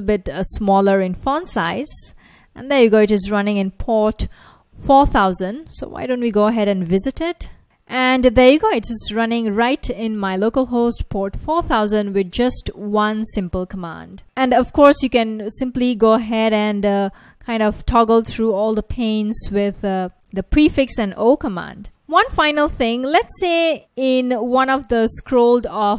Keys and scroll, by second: 5.0 super+Tab, 5.8 super+Tab, 6.0 super+Tab, 9.4 F1, 14.2 super+Tab, 16.3 ctrl+a, 17.7 ctrl+a, 17.9 o, 18.7 ctrl+a, 20.5 ctrl+a, 21.0 o, 21.8 ctrl+a.